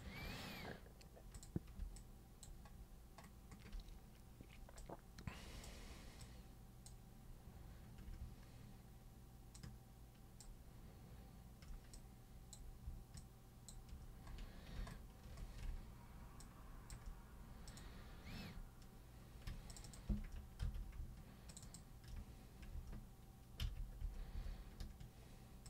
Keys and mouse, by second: 1.3 super+click, 1.9 alt+super+click, 4.8 super+right click, 6.2-6.9 super+drag, 9.6-10.4 ctrl+shift+super+drag, 11.9-12.5 ctrl+super+drag, 13.2-13.7 ctrl+shift+super+drag, 16.4-16.9 ctrl+shift+super+drag, 17.7 ctrl+super+click, 19.7 ctrl+shift+super+click, 19.8 ctrl+shift+super+click, 20.6 ctrl+super+z, 21.5 ctrl+shift+super+click, 23.6 ctrl+super+z, 24.0 ctrl+super+z, 24.3 ctrl+super+z.